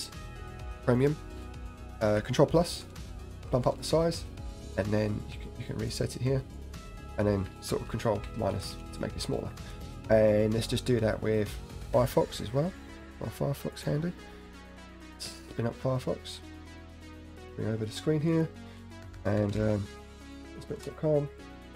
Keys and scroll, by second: 2.8 ctrl+=, 3.2 ctrl+=, 3.4 ctrl+=, 3.6 ctrl+=, 7.9 ctrl+-, 8.4 ctrl+-, 8.5 ctrl+-, 8.7 ctrl+-, 8.9 ctrl+-, 9.2 ctrl+=, 15.6 shift+super+Left.